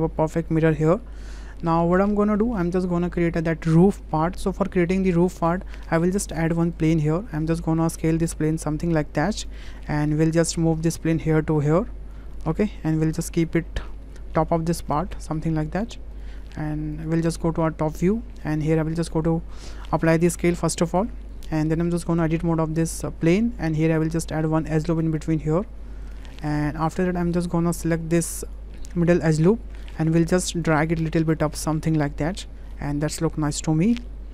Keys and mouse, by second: 0.0-1.1 middle drag, 1.6 shift+middle click, 2.0-2.5 middle drag, 5.3 middle click, 6.0 shift+a, 7.9 s, 10.0 w, 10.6-12.1 drag, 12.3-14.5 middle drag, 14.8-15.4 middle drag, 15.7 s, 17.6-18.0 shift+drag, 20.1 ctrl+a, 22.4 Tab, 23.9 click, 25.0 click, 26.7 click, 28.0 2, 28.5 click, 29.3 click, 30.7-33.9 drag, 34.2 middle click.